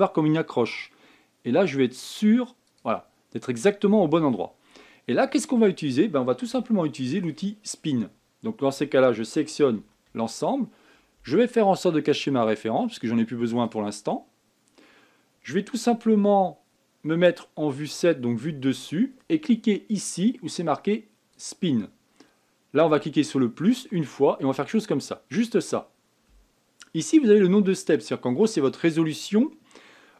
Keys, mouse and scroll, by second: 4.6-7.4 scroll down 28, 7.4-10.5 shift+middle drag, 10.5 a, 10.8 a, 14.4 click, 18.6 KP_7, 20.9-24.2 drag.